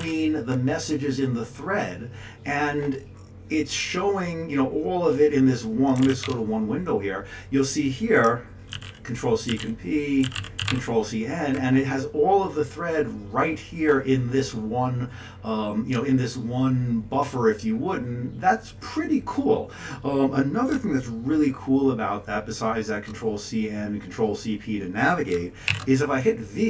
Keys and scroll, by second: 0.0 ctrl+n, 6.0 ctrl+x, 6.2 1, 8.7 ctrl+c, 8.8 ctrl+p, 10.6 ctrl+c, 10.7 ctrl+n, 25.7 shift+v.